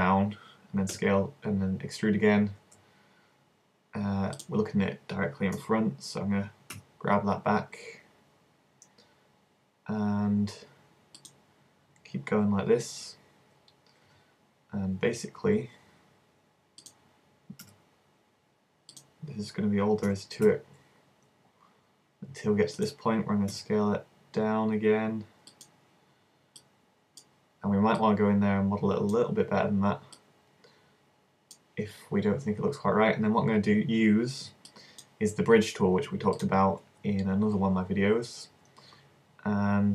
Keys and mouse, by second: 1.0 e, 5.6 KP_1, 6.8 g, 11.4-13.2 drag, 13.2 middle click, 14.1 e, 14.3 middle click, 16.9-18.7 drag, 17.7 s, 19.1-20.9 drag, 20.1 e, 20.9 middle click, 22.9-24.9 drag, 23.6 s, 25.7-29.7 drag, 29.7 middle click, 30.2-31.9 drag, 31.9 middle click, 35.8 middle click, 36.4-39.9 drag.